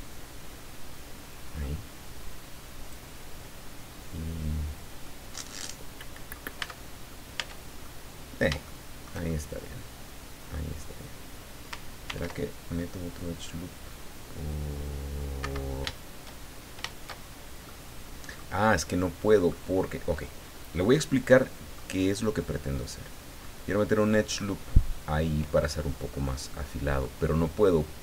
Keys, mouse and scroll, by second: 5.0-6.5 middle drag, 6.6 Tab, 7.1 scroll down 1, 7.4 Tab, 7.8 middle click, 8.7 shift+middle click, 9.6-10.7 middle drag, 12.0 ctrl+r, 15.4 Escape, 17.6 middle click, 18.9 middle click, 21.3 middle click, 22.8 click, 23.4-24.5 middle drag, 26.1 scroll up 1, 26.5 middle click.